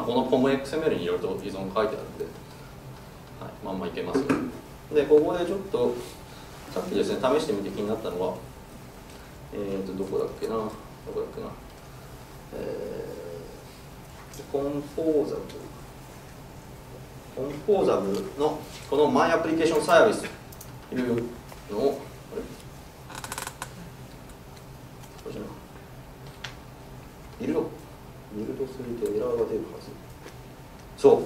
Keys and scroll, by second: 24.9 super+F4, 27.7 super+F9.